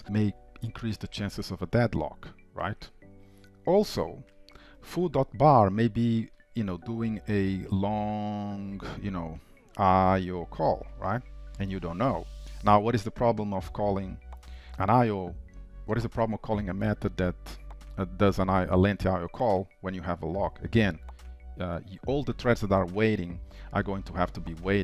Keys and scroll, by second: 11.4 ctrl+s.